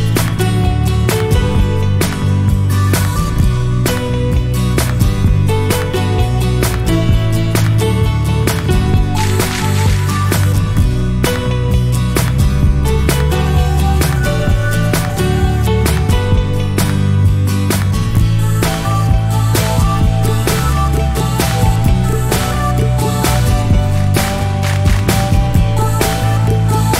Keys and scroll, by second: 14.9 ctrl+c.